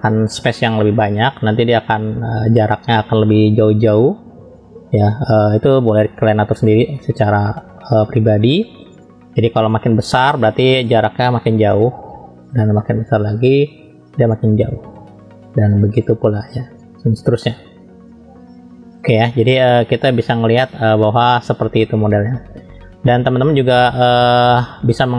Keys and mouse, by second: 1.7-4.0 drag, 4.6 ctrl+z, 6.2 [, 6.4 [, 6.5 [, 6.7 [, 8.0 [, 8.3 [, 9.1-10.4 drag, 10.8 click, 12.6-13.6 drag, 14.3 click, 16.1-17.5 drag, 18.1 click, 19.6-22.3 middle drag.